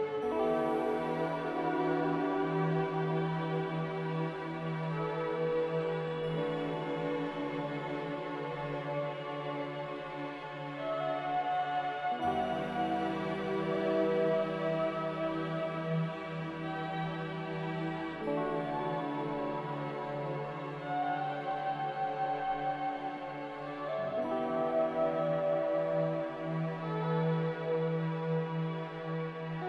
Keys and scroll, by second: 5.1 a, 14.8 ctrl+c, 15.0 ctrl+v, 18.3 ctrl+g, 23.4 m, 28.7 ctrl+b.